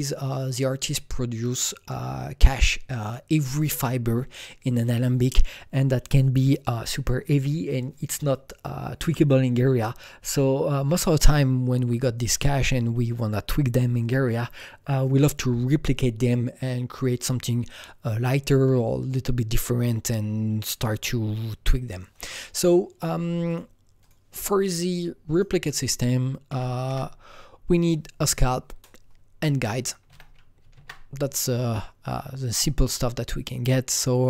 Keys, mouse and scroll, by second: 23.4 click, 24.0 click, 25.4 click, 26.4 Right, 26.8 Right, 30.0 Escape, 30.0 Right, 30.7 Tab, 34.1 alt+Tab, 34.1 Escape, 34.1 click.